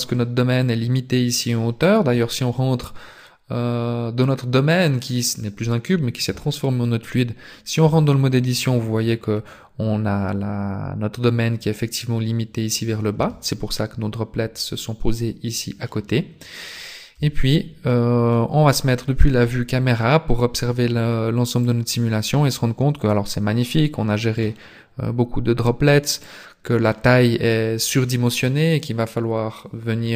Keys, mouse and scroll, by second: 7.8 Tab, 13.1 Tab, 15.8 middle click, 16.8 z, 17.9 middle click, 19.4 KP_0, 20.3 scroll up 1, 21.8 click, 26.2 click.